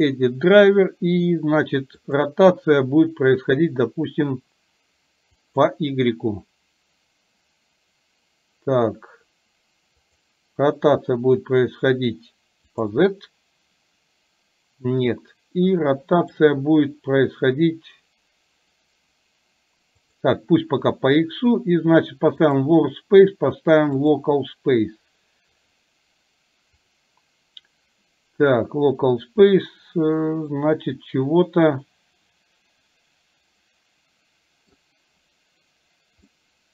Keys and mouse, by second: 30.7-34.9 middle drag, 36.4-36.7 middle drag.